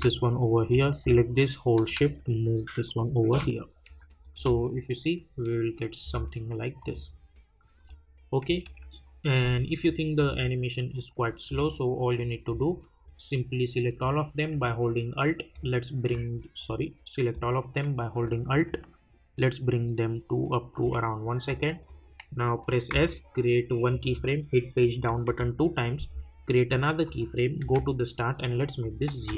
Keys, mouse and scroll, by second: 0.7-4.0 drag, 4.3 space, 6.8 click, 8.4 -, 9.8 click, 10.2 space, 13.0-15.5 drag, 15.5-21.6 alt+drag, 22.9 s, 23.9 click, 24.9 Page_Down, 27.0 click, 27.6 j, 28.8 click, 29.2 Return.